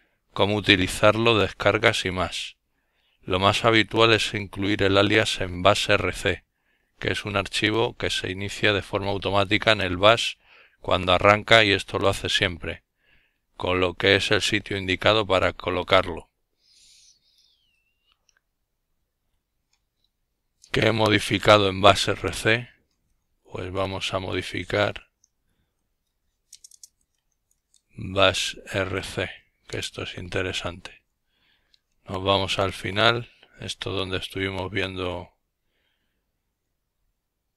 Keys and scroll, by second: 21.1-27.3 typing, 28.1 Return, 30.1-31.3 Down, 30.9-31.7 typing, 37.0 alt+o.